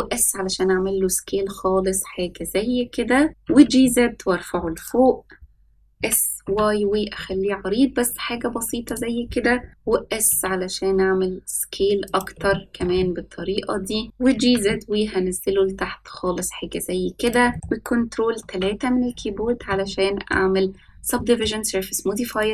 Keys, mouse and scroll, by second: 3.4 g, 5.9 s, 10.2 s, 12.4-12.8 shift+middle drag, 12.9-14.0 middle drag, 14.2 g, 17.5 middle drag, 18.3 ctrl+3, 19.0-19.4 scroll up 2, 19.6-20.3 shift+middle drag, 19.6 scroll up 1, 21.1 middle click, 22.3 right click.